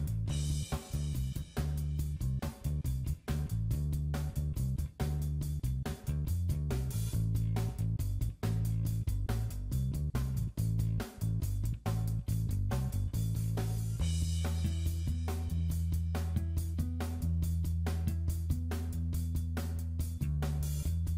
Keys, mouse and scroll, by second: 1.3 scroll down 2, 1.5 middle click, 7.2 click, 8.5 click, 9.5 shift+middle click, 9.6-10.1 scroll up 3, 9.8 middle click, 10.6 click, 10.6 scroll up 1, 11.1 middle click, 11.3 scroll up 1, 11.6 click, 12.1 s, 12.4 middle click, 12.6 shift+middle click, 13.1 middle click, 14.2 click, 15.3 click, 17.2 middle click, 18.7 click, 19.2 middle click, 20.2 click.